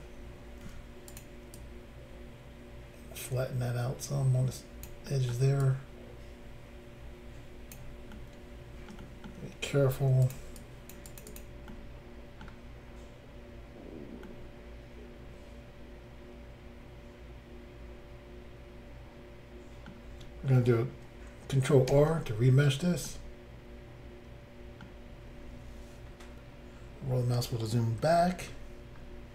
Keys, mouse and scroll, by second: 0.6 f, 1.1 click, 1.2 click, 1.5 click, 5.1 middle click, 5.6 click, 8.1 middle click, 9.0 middle click, 10.3 shift+click, 10.7 shift+click, 11.1 shift+click, 11.2 shift+click, 11.3 shift+click, 11.4 shift+double click, 11.7 middle click, 14.3 middle click, 21.9 ctrl+r, 23.1 middle click, 25.1 scroll up 1, 27.0-28.0 scroll down 1, 28.0-28.5 scroll down 4.